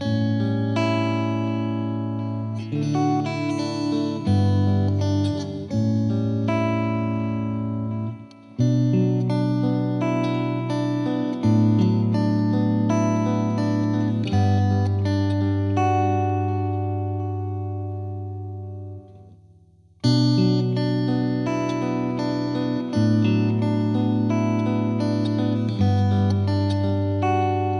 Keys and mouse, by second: 6.1 click, 9.8 click, 13.2 click, 16.6 click, 16.8 click, 18.4 click, 23.3 ctrl+click, 24.7 click, 26.9 click.